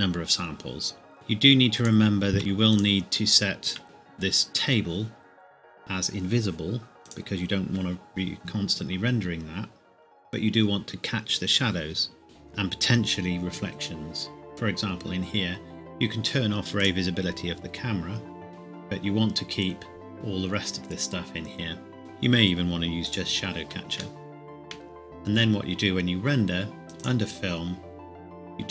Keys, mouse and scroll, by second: 1.1 click, 2.4 Escape, 2.7 click, 3.8-5.2 scroll down 1, 7.0 click, 11.7-13.5 scroll up 1, 14.5-14.8 scroll up 1, 16.7 click, 18.5 scroll down 1, 22.0 click, 24.1 shift+middle click, 26.8 click.